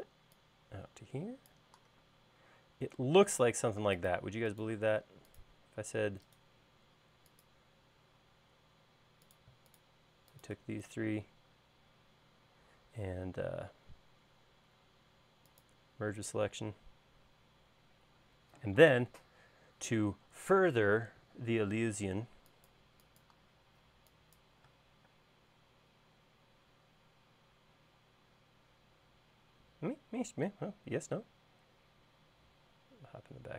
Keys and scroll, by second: 2.2 space, 18.1 e, 25.2 space.